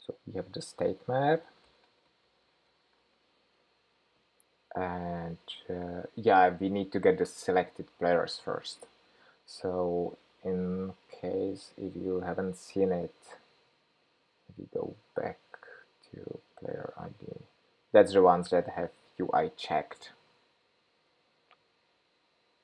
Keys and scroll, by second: 3.8 Escape.